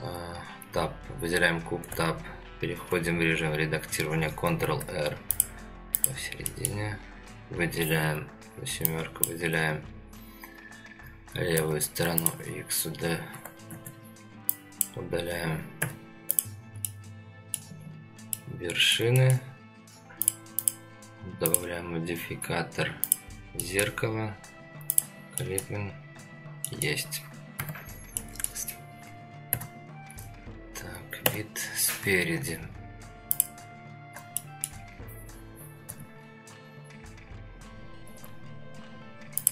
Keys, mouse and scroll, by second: 4.5 ctrl+r, 6.5 middle click, 8.0 KP_7, 8.8-9.2 drag, 11.5 x, 13.7 ctrl+z, 14.5 click, 15.8 x, 16.8 middle click, 17.8-18.3 scroll down 1, 18.3-18.9 middle drag, 19.2 shift+middle click, 20.2 click, 20.6 click, 22.3-23.2 drag, 23.6 middle click, 24.9 click, 25.4 middle click, 26.2-26.6 scroll up 3, 26.7 middle click, 27.6 Tab, 28.2 middle click, 29.5 KP_3, 31.2 KP_1, 32.7-33.2 scroll up 2, 33.3 click, 33.9-34.3 scroll down 2, 34.4-34.7 shift+middle drag, 35.0 scroll up 2, 35.9 g.